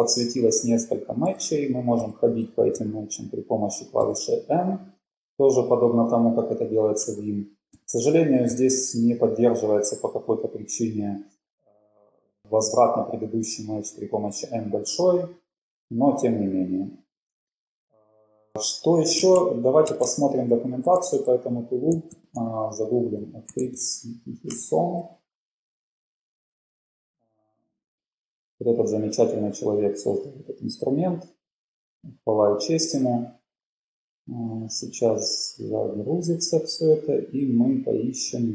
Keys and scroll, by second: 3.0 n, 4.2 n, 7.7 shift+n, 8.7 shift+n, 16.0 n, 16.4 n, 19.4 super+Tab, 20.9 super+t, 22.0-24.3 typing, 24.5 Return.